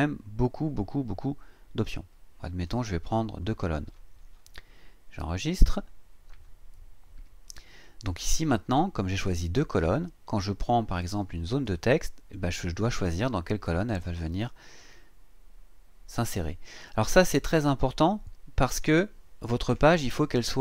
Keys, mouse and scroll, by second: 2.7 click, 3.9-4.3 scroll down 1, 5.6 click, 10.9-17.5 drag.